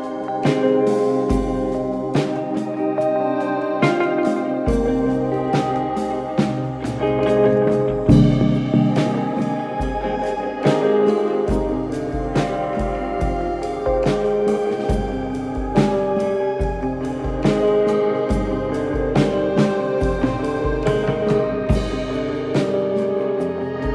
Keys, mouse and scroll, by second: 6.3 click, 8.5 g, 13.3 ctrl+z, 13.9 click, 14.5 KP_1, 15.3 scroll, 16.4 click, 17.4 click, 20.8 click, 21.9 click, 22.8 click, 23.4 click.